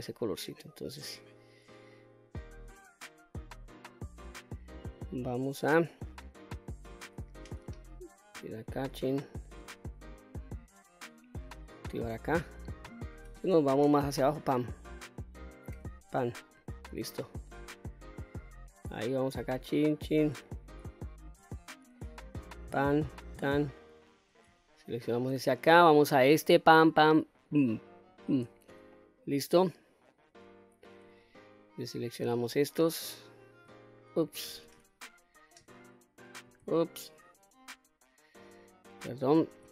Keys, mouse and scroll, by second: 2.1-2.6 scroll down 2, 2.6-4.0 middle drag, 4.3-4.7 scroll up 1, 4.7-5.4 middle drag, 5.8-6.9 middle drag, 7.6 ctrl+z, 8.4 ctrl+z, 8.9 ctrl+z, 9.8-10.9 middle drag, 12.2 click, 14.2 ctrl+KP_Add, 15.7 ctrl+KP_Add, 17.6-18.6 middle drag, 19.5 shift+drag, 20.0 shift+click, 20.4-20.8 scroll up 2, 20.9-21.2 shift+middle drag, 21.6-21.9 middle drag, 22.5 shift+click, 23.1 shift+click, 23.6-24.3 middle drag, 24.7-25.1 shift+middle drag, 25.4 middle click, 26.3 shift+click, 26.8 shift+click, 27.3 shift+click, 28.0 shift+click, 28.5-28.9 scroll down 2, 28.9-30.0 middle drag, 31.2 ctrl+click, 31.9 ctrl+click, 32.5 ctrl+click, 33.1 ctrl+click, 34.5 ctrl+z, 35.8 ctrl+click, 37.1 ctrl+click, 39.6 ctrl+z.